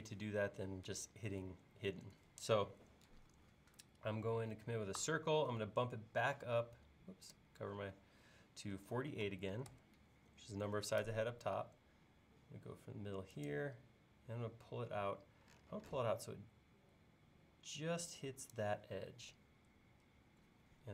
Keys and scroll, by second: 5.0 c, 9.0-9.3 typing, 10.4 typing.